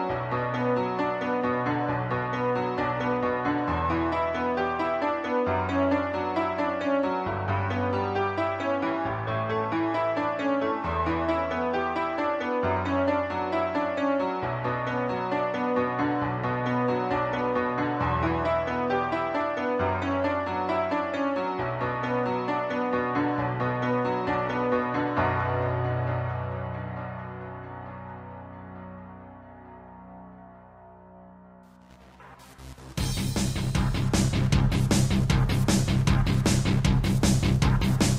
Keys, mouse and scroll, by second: 0.1 click, 0.6 middle click, 1.3 ctrl+s, 1.9 shift+middle click, 2.3 middle click, 3.2 shift+middle click, 3.4 middle click, 3.6 middle click, 3.8 double middle click, 4.6 z, 5.4 click, 6.2 shift+middle click, 6.5-6.8 scroll up 3, 7.1 shift+middle click, 10.0 shift+middle click, 11.0 click, 11.1 click, 11.6 Tab, 12.1 shift+middle click, 14.3 ctrl+z, 15.3 click, 15.7 shift+middle click, 16.3 scroll down 2, 16.7 scroll up 1, 18.0 ctrl+r, 18.4 click, 18.5 click, 20.2 typing, 20.8 click, 21.8-22.6 typing, 23.7 click, 24.0-24.3 scroll up 1, 24.5 shift+middle click, 25.6 ctrl+r, 26.0 click, 26.2 click, 26.3 double click, 27.1 typing, 27.6 double click, 28.9-29.6 typing, 31.1 click, 31.7 click, 32.5 click, 33.0 shift+middle click, 33.8 typing, 34.3 click, 35.6 typing, 37.3 click, 37.9 typing.